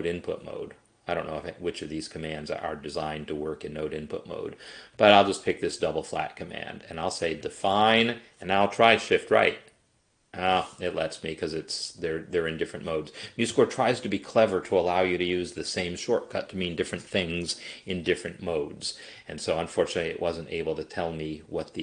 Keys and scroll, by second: 9.6 shift+Right.